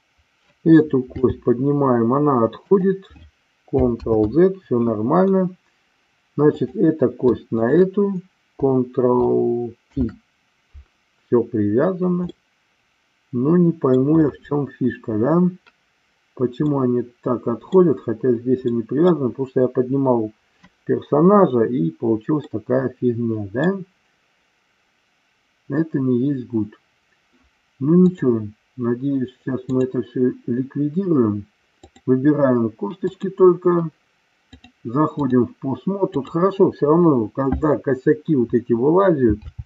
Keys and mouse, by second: 1.2 g, 2.7 click, 4.0 ctrl+z, 6.5 click, 9.9 ctrl+p, 12.3-14.0 middle drag, 16.6-17.8 middle drag, 18.8 middle click, 22.4-23.6 middle drag, 27.9-29.9 drag, 31.8 click, 33.0 click, 34.4 click, 36.2-37.2 drag, 39.4 g.